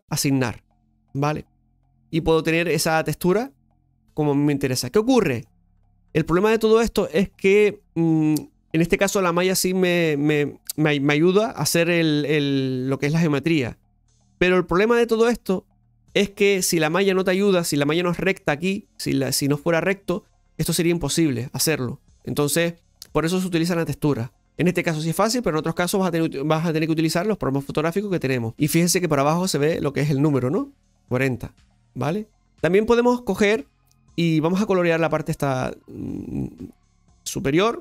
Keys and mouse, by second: 0.1 click, 1.0 right click, 2.1-3.4 middle drag, 4.4-5.4 middle drag, 10.4-26.5 middle drag, 28.5-30.3 middle drag, 32.1 middle drag, 32.8-33.5 middle drag, 35.1 right click.